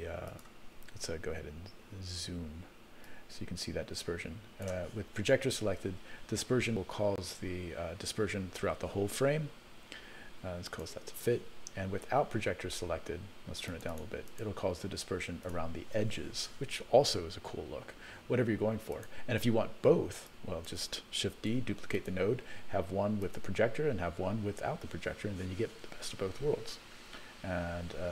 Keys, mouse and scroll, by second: 0.2 click, 3.0-4.6 drag, 10.7 click, 13.8 click, 14.4 click, 15.5 click, 19.0 click, 20.4 click, 21.5 shift+d, 23.3 click.